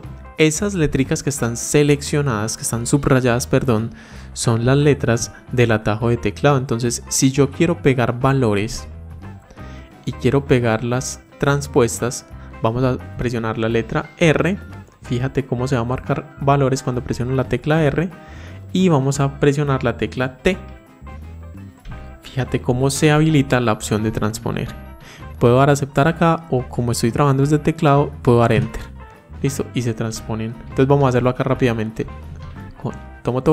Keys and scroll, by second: 32.2 ctrl+shift+Down.